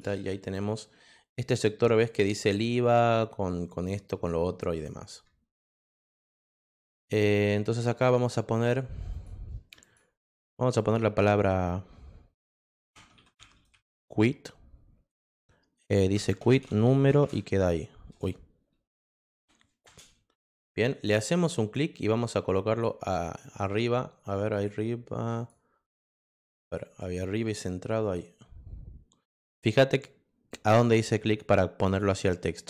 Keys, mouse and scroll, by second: 7.7 click, 9.1 click, 9.8 click, 12.8 c, 14.4 space, 16.2 space, 17.2 shift+1, 18.1 BackSpace, 19.8 Return, 21.1 click, 22.7 click, 23.4 click, 24.5 click, 25.3 click, 26.6 click, 27.4 click, 28.0 click.